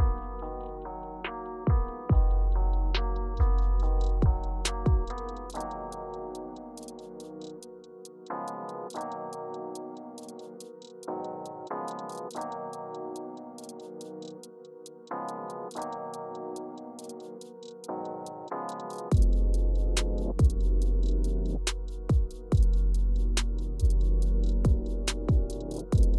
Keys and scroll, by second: 2.2 shift+Up, 2.4 shift+Up, 3.7 Return, 11.2-13.5 typing, 18.2 o, 21.9-23.6 typing.